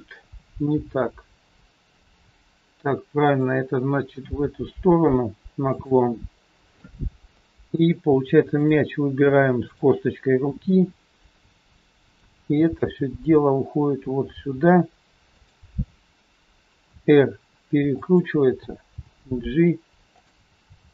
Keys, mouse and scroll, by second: 0.7 r, 5.7 g, 6.8-7.2 scroll up 3, 7.4 shift+middle click, 8.4 click, 9.5 shift+click, 10.8 middle click, 10.8 scroll down 3, 12.8 g, 17.9 r, 20.8 g.